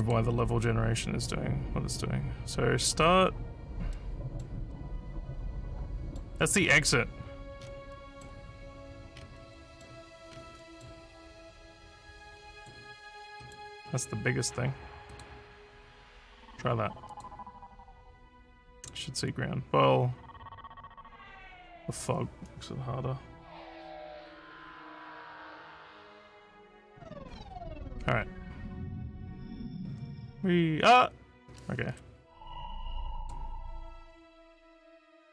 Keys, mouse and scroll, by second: 0.0 click, 3.9 middle click, 4.7-6.2 middle drag, 6.6 scroll up 4, 7.6 scroll down 4, 7.6 scroll up 1, 7.9 middle click, 9.1 scroll up 2, 9.5 middle click, 10.3 scroll down 2, 10.6 middle click, 11.9 click, 13.4 right click, 15.1 click, 17.1 click, 29.2 w, 33.2 click.